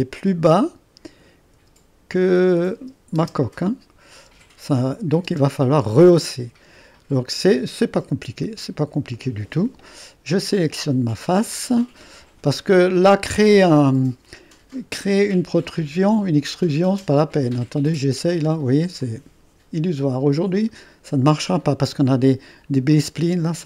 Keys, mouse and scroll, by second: 1.6 space, 2.1 space, 2.8 space, 3.1 space, 3.5-4.9 drag, 4.3 space, 4.9 space, 5.2 space, 7.8-12.9 drag, 16.4 click, 21.1-23.6 drag.